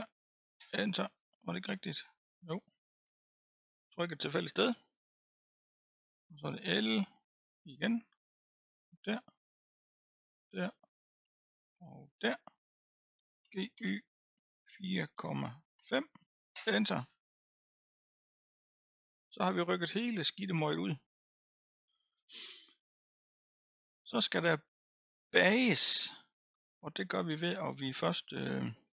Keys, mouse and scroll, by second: 1.0-1.8 scroll down 15, 2.3-3.4 scroll up 11, 3.4 click, 3.7-4.8 scroll up 6, 4.8-5.2 scroll up 2, 5.2-6.6 middle drag, 6.6 l, 7.3 l, 8.8 l, 9.3-10.3 scroll down 2, 10.3 l, 10.7-12.0 middle drag, 12.0 l, 13.4 g, 17.0-18.1 scroll down 17, 18.1-19.4 scroll up 3, 19.4-28.9 middle drag.